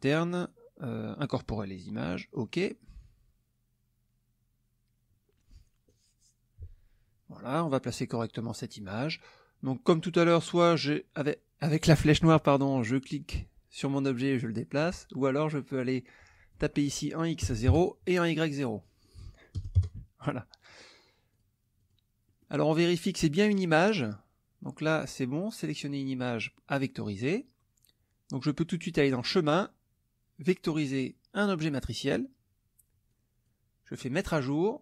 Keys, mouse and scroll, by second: 2.3 click, 13.1-14.9 drag, 16.5 click, 17.4 KP_0, 17.6 KP_Enter, 18.8 click, 19.6 KP_0, 19.7 KP_Enter, 21.3 click, 21.8 click, 22.3 middle click, 29.1 click, 31.7 click, 33.1 click, 34.2 click.